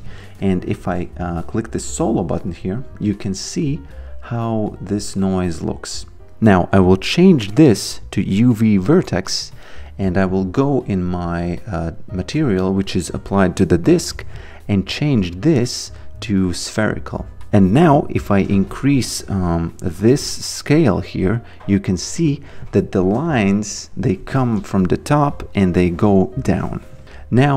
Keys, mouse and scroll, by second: 0.7 q, 5.1 click, 7.4 click, 11.3 click, 15.5 click, 18.3 click, 23.3 alt+click.